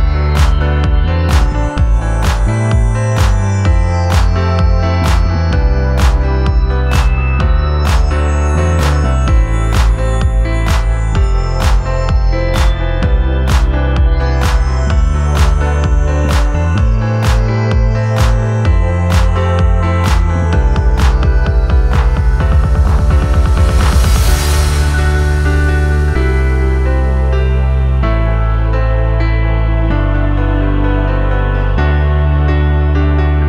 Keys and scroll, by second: 1.7 2, 2.8 ctrl+z, 3.4 3, 4.5 ctrl+z, 6.4 p, 7.6 p, 9.4 p, 10.4 p, 16.1 p, 17.1 p, 20.1 p, 21.4 p, 22.6 p, 25.0 p, 26.8 p, 29.0 ctrl+d, 29.2 Escape, 31.4 p, 32.8 4.